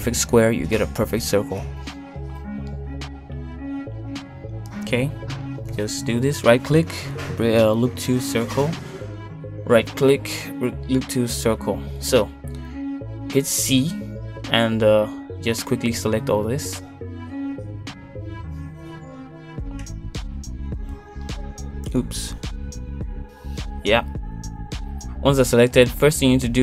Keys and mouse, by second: 1.2 click, 5.6 ctrl+shift+click, 10.1 click, 10.6 ctrl+shift+click, 14.4 shift+middle click, 16.6 c.